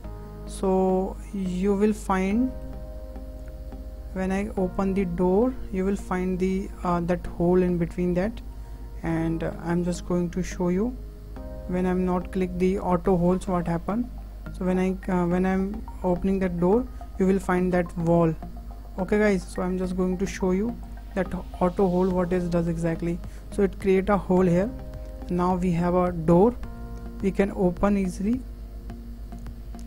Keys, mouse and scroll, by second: 0.8-1.1 scroll down 2, 1.1-1.5 shift+middle drag, 1.5-1.9 scroll up 5, 1.9 shift+middle drag, 2.2-2.5 scroll down 3, 2.5-3.4 middle drag, 3.4 click, 4.8 click, 6.5-8.0 middle drag, 8.0 scroll up 2, 8.4-8.7 shift+middle drag, 8.7-9.1 scroll down 2, 9.1-9.8 ctrl+middle drag, 9.6 ctrl+z, 9.8 ctrl+z, 10.2 ctrl+z, 10.9 ctrl+z, 11.0 ctrl+z, 11.9-13.3 shift+middle drag, 13.3 click, 15.5 click, 17.0-19.6 middle drag, 19.6 click, 20.9 click, 21.5-24.3 middle drag, 24.3 scroll up 3, 24.6-24.9 scroll down 4, 24.9-26.3 middle drag, 26.3-26.7 scroll down 2, 26.7-27.5 middle drag, 27.5 click, 29.3 click.